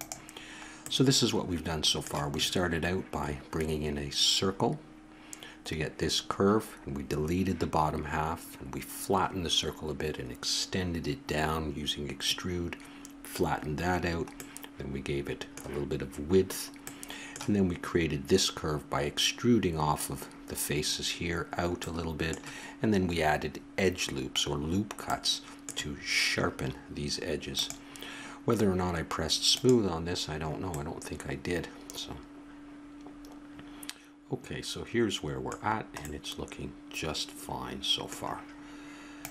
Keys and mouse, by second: 0.0-2.8 middle drag, 14.4-16.4 middle drag, 16.9-18.8 middle drag, 21.8 middle click, 24.6-26.7 middle drag, 26.9 middle click, 27.5-31.8 drag, 31.8 middle click, 35.6-39.3 middle drag.